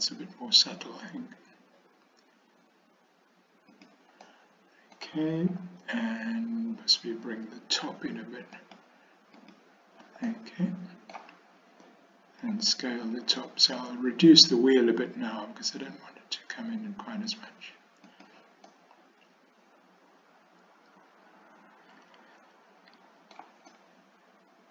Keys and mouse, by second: 4.3 middle click, 10.4 middle click, 12.5 s, 18.8-23.4 middle drag, 23.8-24.7 middle drag.